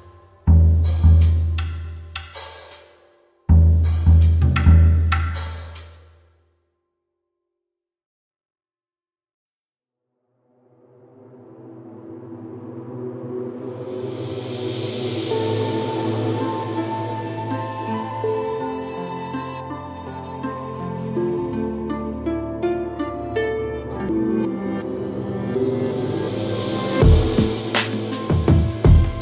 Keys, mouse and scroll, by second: 0.5 click, 1.0 middle click, 1.5 middle click, 1.9 click, 2.8 alt+middle click, 5.0 click, 5.8 alt+middle click, 6.8 click, 10.6 middle click, 11.3 click, 11.8 middle click, 11.9-12.8 scroll, 12.2 middle click, 12.6 middle click, 13.7-14.9 alt+scroll, 13.9 alt+middle click, 14.3 alt+middle click, 14.4 alt+middle click, 14.9 click, 15.2-15.8 scroll, 16.3 scroll up 9, 16.7 alt+middle click, 17.8 click, 19.0 click, 20.1 alt+middle click, 22.2 click, 23.3 alt+middle click, 23.5 click, 23.7-24.1 scroll, 24.5 scroll, 25.0 alt+middle click, 25.5 alt+middle click, 26.3 click, 27.1 middle click, 28.6 click.